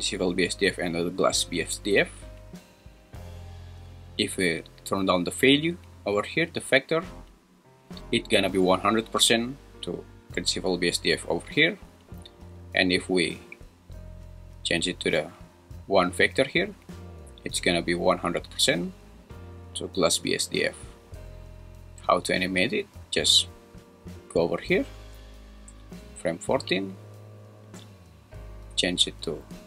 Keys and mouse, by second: 1.2 click, 3.9-6.9 drag, 12.6-15.1 drag, 24.4-26.3 drag, 25.3 Left, 27.8-29.4 drag.